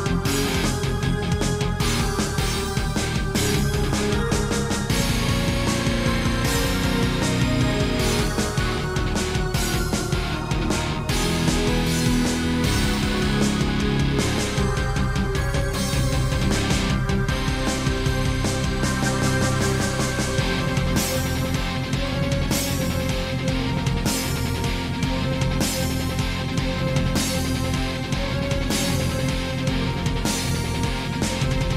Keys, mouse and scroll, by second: 0.1 shift+middle click, 0.5 scroll up 1, 2.0 click, 2.8 middle click, 3.5 s, 6.2 Escape, 6.9 i, 7.8 click, 8.4 shift+middle click, 8.7 scroll up 1, 9.8 click, 11.0 shift+click, 12.2 i, 12.8 click, 13.3 scroll up 2, 13.7 shift+middle click, 14.6 middle click, 15.7 scroll up 1, 16.3-16.9 scroll down 2, 17.7 click, 18.5 shift+click, 19.5 shift+click, 19.5 i, 20.9 click, 21.2 scroll down 2, 21.5 shift+middle click, 22.3 click, 23.0 shift+click, 24.0 i, 25.0 click, 25.7 middle click, 26.8 shift+middle click, 28.6 shift+middle click, 29.8 shift+middle click, 30.7 click.